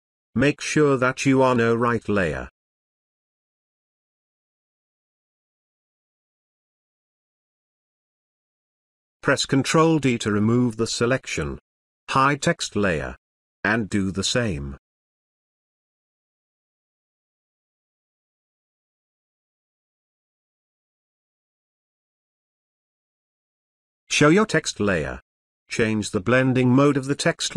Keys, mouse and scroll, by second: 3.3-8.3 drag, 9.4 ctrl+d, 10.2 space, 10.5-11.7 ctrl+drag, 15.5 click, 16.7 space, 16.8-17.3 ctrl+click, 18.9 click, 19.0 ctrl+space, 19.1-19.8 ctrl+click, 19.9 space, 20.0-20.5 ctrl+click, 21.6 alt+click, 21.9 space, 22.0-22.3 ctrl+click, 22.7 space, 22.9 alt+click, 23.4 space, 23.5 ctrl+drag, 25.5 space, 25.7 click.